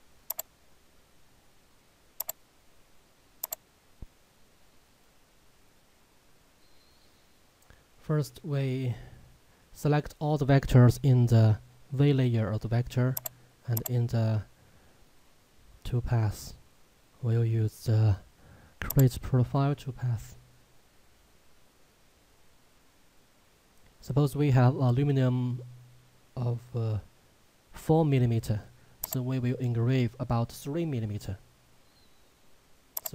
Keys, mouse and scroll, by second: 13.3 click, 19.4 click, 29.1 click.